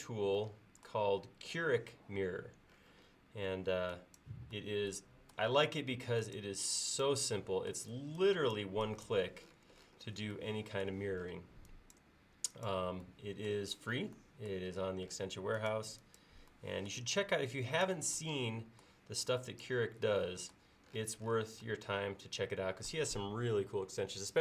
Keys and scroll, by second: 3.5 e.